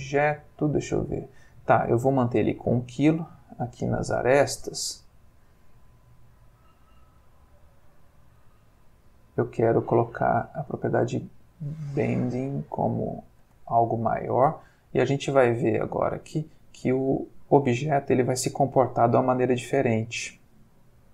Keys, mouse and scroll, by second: 3.6 click, 4.1 middle click, 5.6 middle click, 8.0 click, 8.4 middle click, 9.9-12.4 drag, 13.4 space.